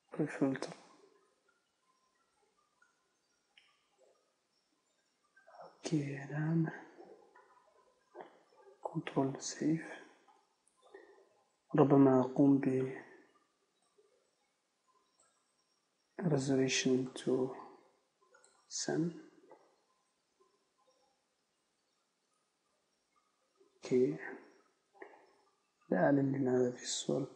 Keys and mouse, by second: 9.9 ctrl+s, 20.6-21.6 middle drag, 21.6 z, 26.1 middle click.